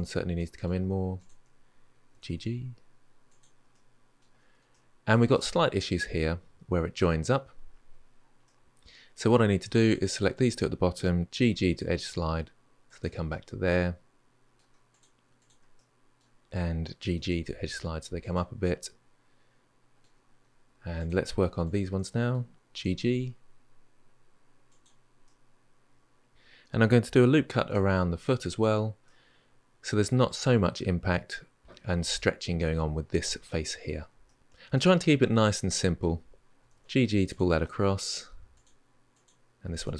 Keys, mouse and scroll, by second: 0.1-1.0 middle drag, 1.0 shift+click, 1.9 g, 3.5 middle click, 4.5 scroll up 1, 4.7-8.1 shift+middle drag, 8.2-9.7 middle drag, 9.7 click, 10.1 shift+click, 11.1 g, 13.0-14.7 middle drag, 14.7 click, 15.2 shift+click, 15.5-16.9 middle drag, 16.9 g, 18.4-20.7 middle drag, 20.7 click, 21.4 shift+click, 21.9 middle click, 22.5 g, 25.0-26.3 middle drag, 27.3 ctrl+r, 28.8-31.6 middle drag, 34.0-36.5 middle drag, 36.5 g, 37.4-38.3 middle drag, 38.3 click, 38.9 click, 39.4 g.